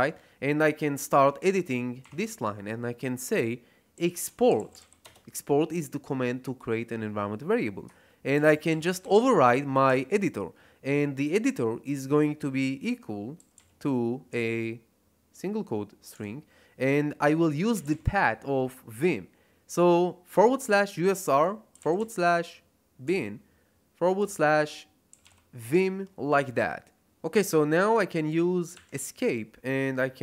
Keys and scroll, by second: 3.7-5.2 typing, 8.1-9.8 typing, 13.3 ', 13.5 ', 16.1 /, 17.4-18.4 typing, 20.2 /, 21.4-23.0 typing, 24.1-25.7 typing, 28.7 Escape, 30.1-30.2 typing.